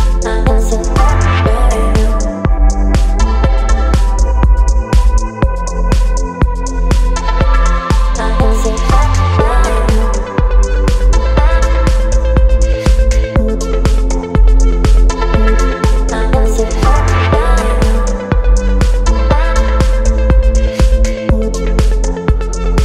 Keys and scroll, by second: 3.3 Return, 6.1 Down, 7.0 Down, 7.1 Down, 7.2 Down, 7.5 Down, 10.2 ctrl+BackSpace.